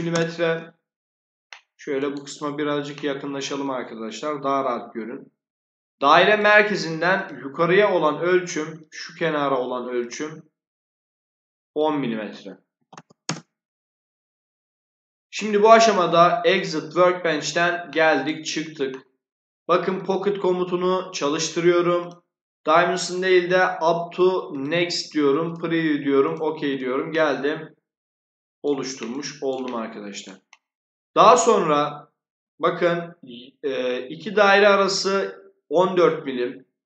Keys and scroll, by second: 0.0-0.3 typing, 12.4-13.3 typing.